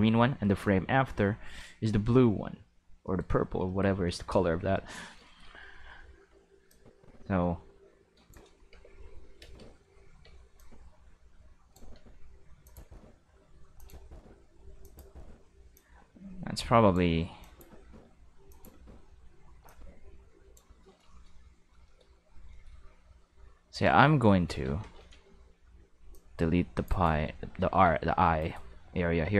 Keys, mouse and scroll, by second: 3.0 shift+middle click, 3.7 shift+middle drag, 6.7-8.4 drag, 8.7 Tab, 9.4 space, 10.2 space, 10.5-11.7 drag, 11.9-15.6 typing, 12.6 click, 13.8 click, 14.8 click, 15.7-16.9 drag, 17.4 click, 17.8 space, 18.3 space, 18.5 click, 18.7 space, 19.6 space, 19.6-20.5 drag, 23.7 Tab, 24.3 middle click, 24.5 alt+a, 24.8 c, 26.1-26.8 drag, 27.2 middle click, 27.7 a, 28.1 g, 28.4 right click, 29.2 a.